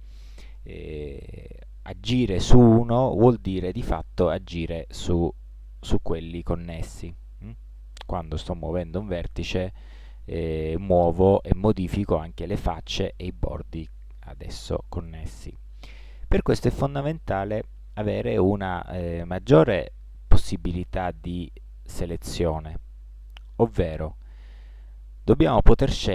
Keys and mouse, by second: 3.2-5.5 right drag, 5.5 g, 17.3-21.0 right drag, 21.0-25.1 middle drag.